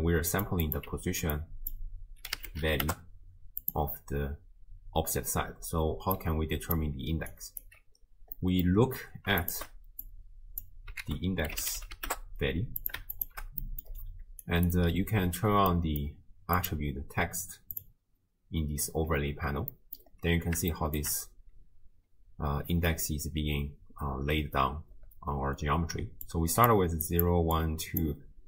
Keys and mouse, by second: 0.3 click, 0.6 click, 1.4-3.6 drag, 6.0-7.3 d, 6.2 click, 7.3 click, 7.6 d, 7.7 d, 8.4 click, 9.5 ctrl+shift+click, 10.1 click, 11.1 ctrl+a, 13.1 ctrl+shift+click, 13.6 middle click, 14.2 d, 14.5 click, 14.8 d, 15.1 d, 15.8 middle click, 16.6-18.1 drag, 19.9 middle click, 20.7-21.1 shift+middle drag, 24.9-28.4 typing, 27.1 click.